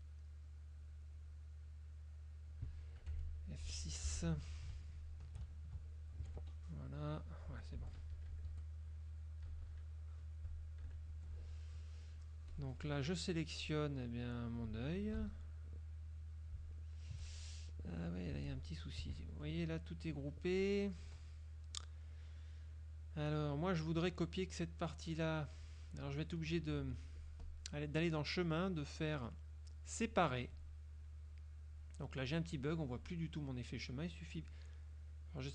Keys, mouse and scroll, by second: 1.3-2.7 drag, 3.1 F5, 4.1 F6, 4.9 shift+click, 6.3 ctrl+F1, 6.5 F2, 6.5 right click, 7.5 F2, 8.1 KP_Subtract, 8.5 Escape, 9.5 KP_Subtract, 10.9 KP_Subtract, 11.2 F1, 11.7 click, 12.6-13.9 drag, 14.6-15.5 drag, 15.5 ctrl+z, 16.8 shift+click, 18.1 click, 18.9 F1, 19.5 F2, 19.5 click, 20.2 click, 20.7 click, 21.7 click, 27.5-30.4 drag, 34.5-35.5 drag.